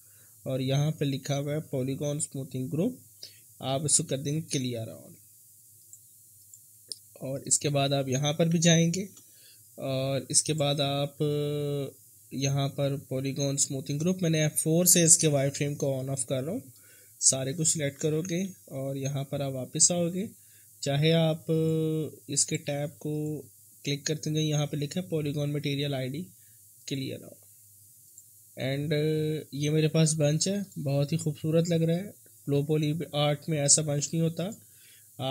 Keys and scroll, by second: 8.6 F4, 15.3 F4, 15.6 F4, 18.1 ctrl+a.